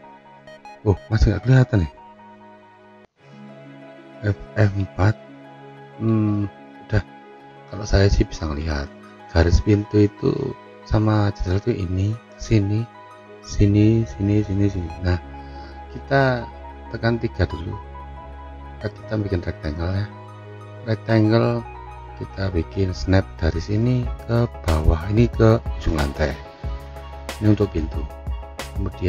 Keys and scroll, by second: 2.8 g, 4.7 F3, 5.9 F3.